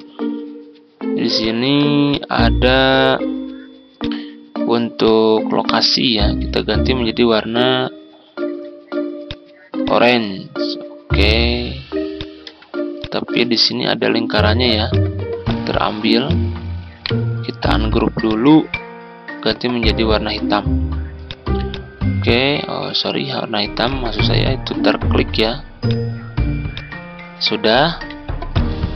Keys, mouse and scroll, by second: 1.4 click, 2.1-10.8 drag, 12.9 click, 17.0 right click, 18.2 click, 22.0-22.4 ctrl+scroll down 1, 23.8-24.8 drag, 27.1-27.4 ctrl+scroll down 1, 28.5 click.